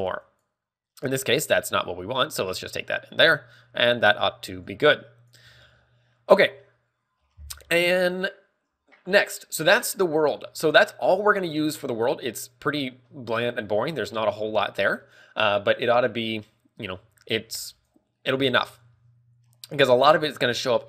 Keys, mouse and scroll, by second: 0.3 click, 4.0 click, 4.0 scroll up 1, 4.3 scroll down 2, 4.8 click, 4.8 scroll down 3, 5.7 scroll up 1, 6.4 middle click, 6.4 scroll up 5, 10.5-10.9 scroll down 2, 14.3 middle click, 14.8-15.3 scroll up 1, 15.3 middle click, 15.3-16.0 scroll up 1, 17.8 ctrl+w, 17.8 middle click.